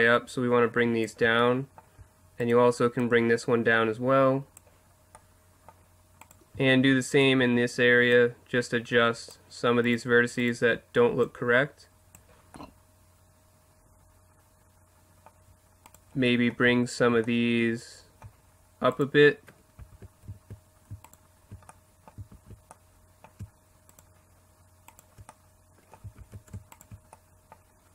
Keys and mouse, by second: 3.0-4.8 drag, 3.0-4.1 right drag, 6.2-9.0 middle drag, 8.1-9.8 drag, 9.8 middle click, 10.0-11.2 right drag, 11.2 middle click, 12.5 click, 12.8 middle click, 15.0-17.4 middle drag, 18.9-20.7 right drag, 19.8 ctrl+z, 21.0-22.1 right drag, 22.3 ctrl+z, 26.2 ctrl+z.